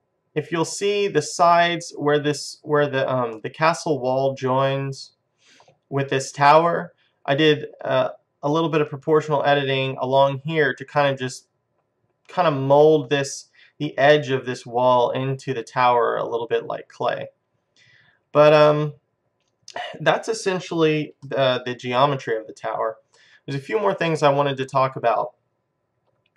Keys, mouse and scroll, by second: 0.0-3.4 middle drag, 3.9-5.2 middle drag, 17.5 middle click, 18.9 middle click, 21.6 middle click, 25.0-26.3 middle drag.